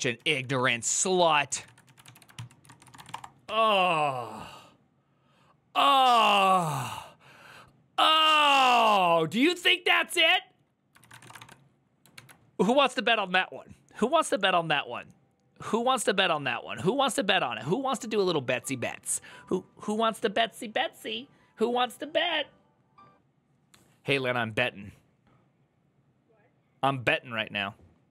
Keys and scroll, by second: 0.0-3.2 typing, 10.6-11.5 typing.